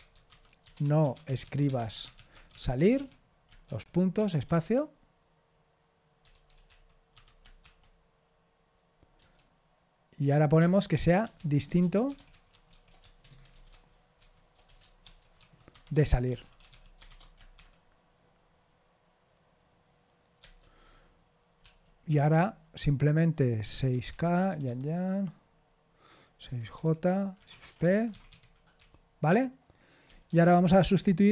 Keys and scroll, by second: 0.0-4.1 typing, 4.4 Escape, 7.6 typing, 12.7-18.0 typing, 22.0 Escape, 22.0 typing, 24.2-25.1 typing, 27.5-29.2 typing.